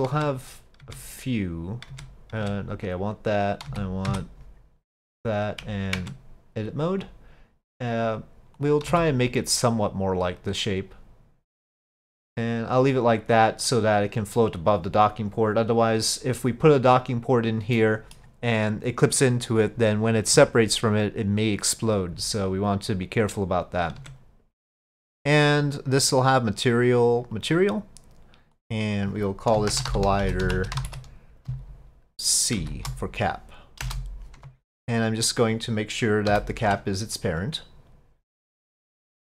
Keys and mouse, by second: 0.2 Tab, 0.8 Tab, 1.9 Tab, 2.4 Tab, 3.7 z, 6.0 Tab, 8.0 click, 8.6 click, 8.9 s, 11.6 click, 12.3-13.7 middle drag, 17.8 middle click, 24.0 Tab, 26.6 click, 28.6-35.1 drag, 30.2 l, 36.3 ctrl+p.